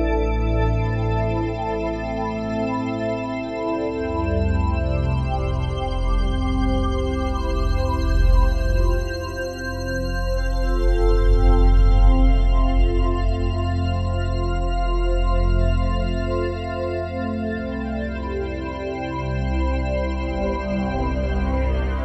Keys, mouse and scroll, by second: 0.8 click, 2.3 click, 2.3 typing, 4.0 typing, 5.7 middle click, 6.2-7.4 middle drag, 8.6 middle click, 12.9-16.1 drag, 16.2-17.9 drag, 18.8-20.6 drag, 20.6 middle click.